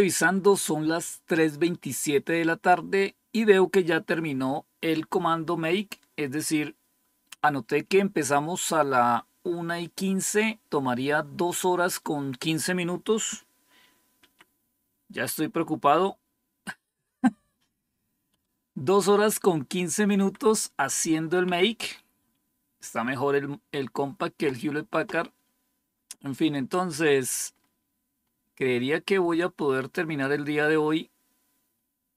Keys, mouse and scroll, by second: 14.1 Up, 18.2 Down, 20.0 Up, 21.3 Down, 27.4-29.2 scroll up 1, 29.2-29.7 scroll down 3.